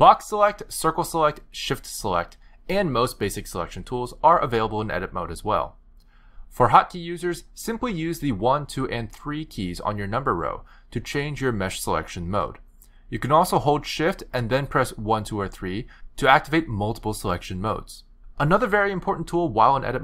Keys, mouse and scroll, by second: 0.5 b, 1.6 c, 8.2 1, 9.2 2, 10.1 3, 14.2 shift+1, 14.9 shift+2, 16.3 shift+3, 17.7 shift+3.